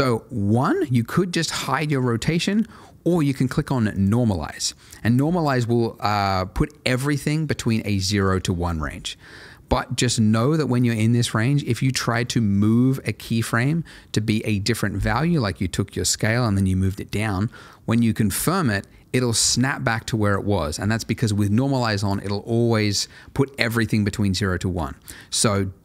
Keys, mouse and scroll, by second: 3.9 click, 11.6 click, 16.3 g, 18.3 click, 25.5 ctrl+z.